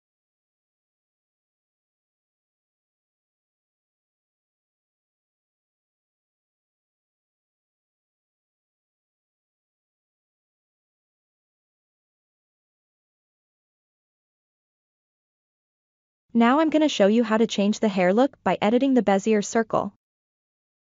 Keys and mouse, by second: 0.0 Tab, 0.1 middle click, 0.3 click, 0.5 click, 0.6 shift+click, 0.8 middle click, 1.2 click, 1.7 middle click, 2.1 middle click, 2.2 click, 2.6 click, 2.7 middle click, 3.2 click, 3.6 middle click, 4.0 Tab, 4.2 middle click, 4.9 Tab, 5.0 middle click, 5.2 click, 5.5 click, 5.6 click, 6.0 Tab, 6.1-8.4 middle drag, 8.6 click, 8.8 middle drag, 9.0 Tab, 9.1 middle click, 9.5 click, 9.8 click, 10.0 click, 10.4 click, 10.7 click, 11.1 click, 11.4 shift+middle click, 12.4 Tab, 12.7 Tab, 13.1 shift+click, 13.5 alt+s, 13.7 middle drag, 14.0 Tab, 14.1 shift+middle click, 14.3 drag, 14.4-15.2 middle drag, 16.4 click, 16.8 ctrl+middle click, 17.2 shift+middle drag, 17.8-18.1 ctrl+middle drag, 18.4 shift+middle click, 19.3 ctrl+middle drag, 20.5 KP_7.